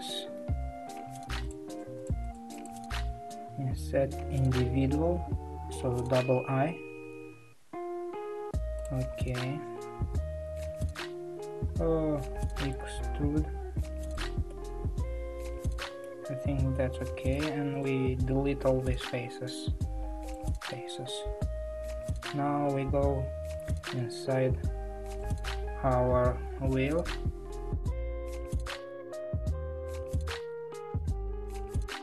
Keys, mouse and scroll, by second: 0.4 KP_3, 1.7 shift+click, 1.9 shift+drag, 2.2 shift+click, 2.5 shift+click, 10.1 KP_1, 12.8 e, 14.5-17.8 middle drag, 17.8 shift+click, 20.3 Delete, 20.7-22.6 middle drag, 22.6 scroll up 1, 24.0 a, 25.3 click, 27.1-27.8 Tab, 28.3 Tab, 29.8 `, 30.6-31.4 middle drag, 31.4-31.9 scroll down 1, 31.9 scroll up 5.